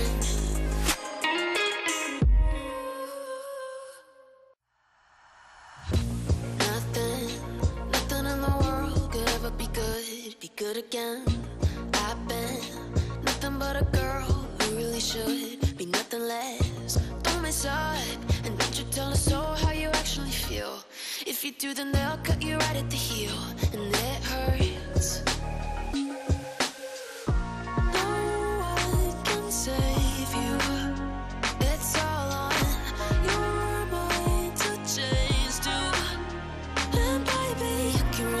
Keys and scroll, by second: 3.9 r, 7.7 F3, 8.1 Escape, 8.4 F2, 17.3 shift+Page_Up, 23.9 space, 32.4 KP_Add, 32.8-36.3 typing, 36.9 ctrl+space.